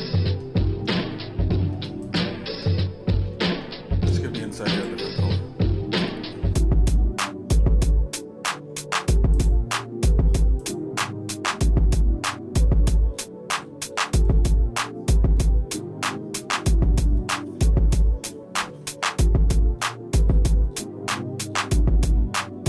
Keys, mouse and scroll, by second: 0.3 middle click, 1.0 shift+middle click, 2.1 click, 2.5 Tab, 4.8 click, 6.0 l, 9.5 click, 10.9-22.6 drag.